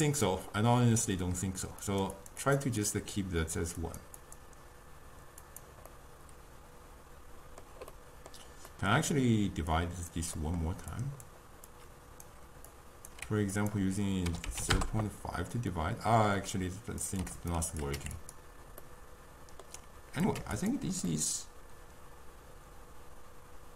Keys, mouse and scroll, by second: 1.9-6.1 drag, 6.1-9.8 middle drag, 9.8 click, 10.5-11.0 middle drag, 11.0 click, 11.8 click, 12.8-15.8 drag, 15.8-17.1 middle drag, 17.1 click, 17.9 click, 18.9-20.3 middle drag, 20.3 click, 21.2-23.7 middle drag.